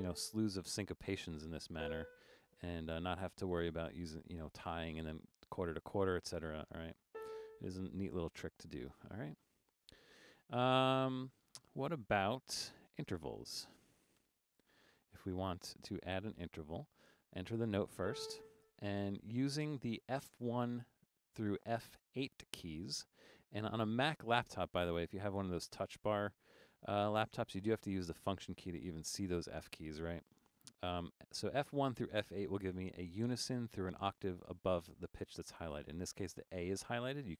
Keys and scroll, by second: 0.0-0.2 typing, 1.8 b, 7.2 a, 10.6-14.2 typing, 15.4 BackSpace, 18.0 a.